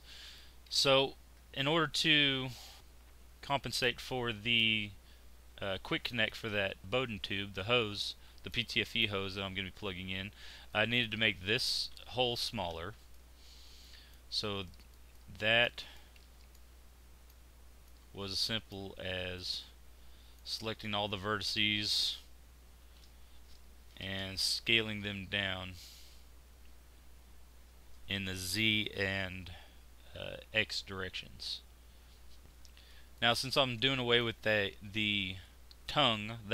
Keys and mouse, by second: 0.6-6.2 middle drag, 12.3 Tab, 14.3 z, 14.8-15.9 middle drag, 19.0 z, 22.8 shift+s, 32.4 z, 32.7 z.